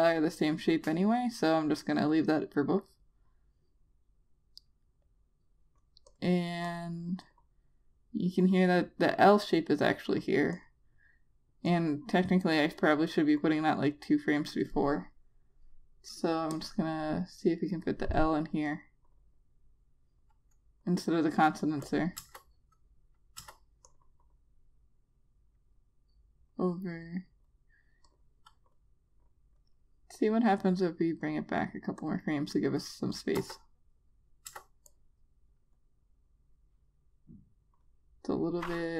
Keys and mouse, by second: 23.0 click, 24.2 Return, 24.7 click, 34.2 Return, 35.3 Return, 35.7 click.